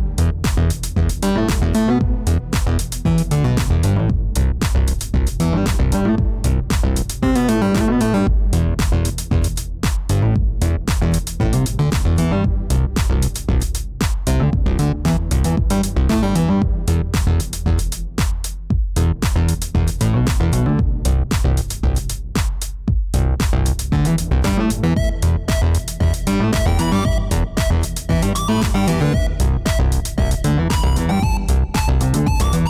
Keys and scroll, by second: 24.3 1, 24.5 ., 24.7 5, 25.7 Return, 32.2 ctrl+alt+0.